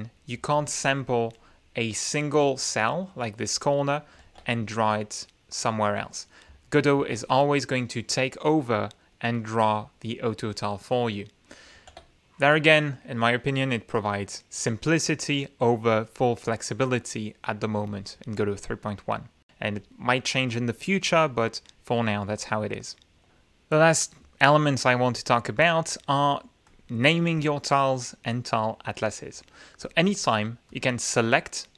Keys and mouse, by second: 0.5 ctrl+click, 1.3 ctrl+click, 1.9 ctrl+click, 2.5-3.0 ctrl+middle drag, 3.4 click, 4.2 ctrl+z, 4.4 ctrl+click, 6.0 click, 6.9 ctrl+z, 7.3-8.9 ctrl+drag, 9.3 click, 10.6 middle click, 11.7 ctrl+z, 19.0-19.5 middle drag, 19.1 click, 23.3 r, 26.6 click, 29.8 click, 30.6 click.